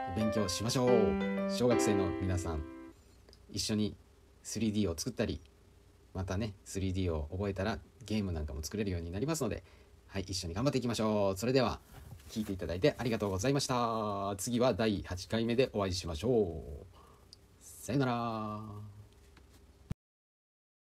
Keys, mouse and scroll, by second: 2.7 middle click, 3.6-4.0 middle drag, 5.2 click, 7.1 KP_Decimal, 8.4-13.8 middle drag, 14.7-15.9 middle drag, 16.0 space.